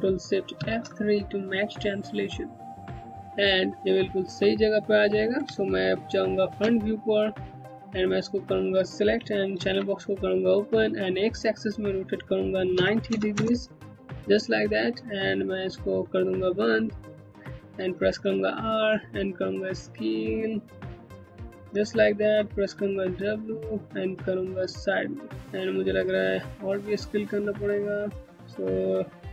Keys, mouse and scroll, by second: 0.1 ctrl+shift+F3, 2.1 click, 2.4 scroll up 1, 2.7 alt+click, 2.9 Home, 5.1 space, 5.2 Home, 5.2 click, 5.5 space, 6.8 scroll down 1, 7.5 click, 9.1 alt+c, 11.1 click, 12.4 KP_9, 12.7 KP_0, 12.9 KP_Enter, 15.8 KP_Enter, 16.0 click, 17.4 r, 18.4 middle click, 21.8 w, 23.1 click, 25.4 r, 26.1 middle click.